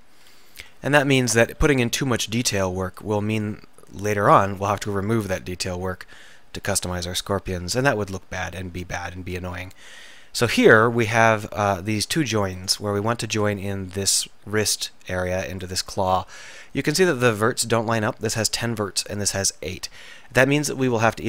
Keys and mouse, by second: 0.4 KP_1, 0.7 KP_3, 1.6 r, 5.5-9.7 middle drag, 12.6-19.2 middle drag, 19.2 click, 19.5-21.2 middle drag.